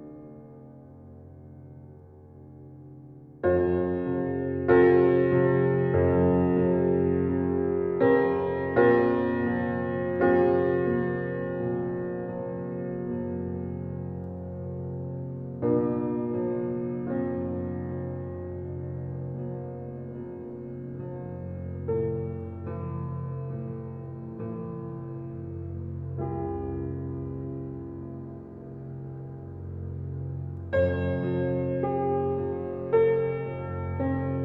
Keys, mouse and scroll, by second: 1.1 scroll down 1, 1.7 scroll up 1, 2.2-3.2 scroll down 1, 3.2-3.7 scroll up 1, 9.9 scroll down 1, 11.2 scroll up 1, 14.3-22.6 drag, 22.3-23.3 typing, 23.8 Return, 26.7 click, 29.5-30.0 scroll down 1, 30.0-32.6 drag, 32.6-33.8 scroll up 1, 33.8-34.4 typing.